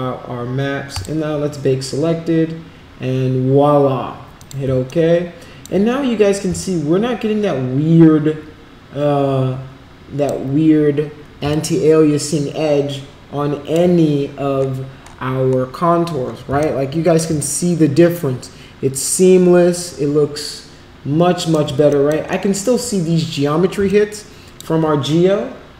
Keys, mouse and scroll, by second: 0.9 click, 4.3 click, 4.8 alt+click, 6.6-10.2 alt+drag, 11.5-13.7 alt+drag, 16.6 alt+click, 17.4-21.5 shift+right drag, 21.8 alt+click, 22.3 alt+middle click, 23.8 alt+click.